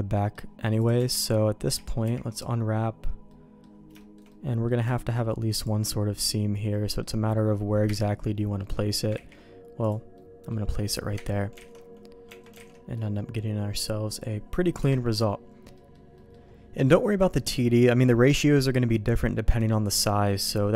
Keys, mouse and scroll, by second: 0.1 middle click, 0.7 click, 0.9 Tab, 1.7 a, 2.0 u, 3.2 middle click, 3.9 shift+middle click, 4.2 middle click, 4.8 shift+middle click, 5.8-7.0 middle drag, 7.9 KP_Divide, 8.6 click, 9.1 ctrl+e, 10.1 click, 11.1 KP_Divide, 11.6 alt+a, 12.2 Tab, 12.5 alt+a, 12.7 middle click, 13.1-14.2 middle drag, 14.8 KP_Divide, 15.7 middle click, 16.1 middle click, 19.8 click.